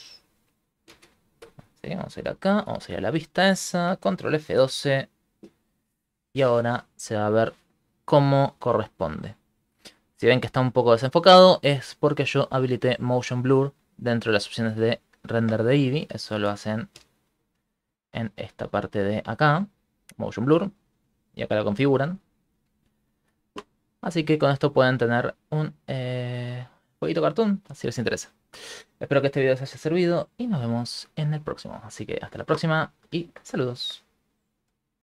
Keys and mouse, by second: 0.9 ctrl+alt+space.